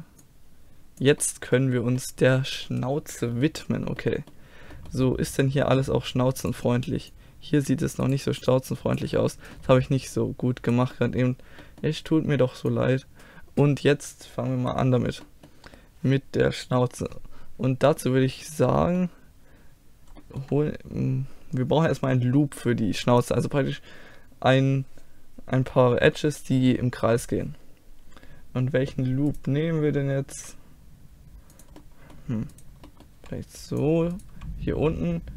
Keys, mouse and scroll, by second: 0.3-2.2 drag, 0.3-1.9 middle drag, 6.5 middle click, 7.2-11.0 drag, 7.2-9.9 right drag, 9.2 middle click, 9.6 middle click, 11.0-14.7 middle drag, 15.3 middle click, 18.8 middle click, 24.1-29.3 middle drag, 29.3-30.6 right drag, 30.4 g, 30.6-31.8 drag, 32.6 click, 33.2 g, 34.4 g, 34.6-35.3 drag.